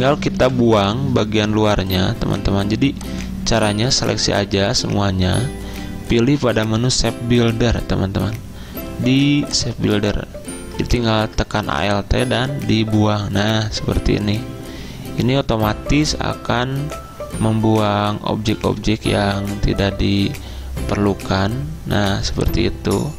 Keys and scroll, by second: 1.1 v, 22.2 z.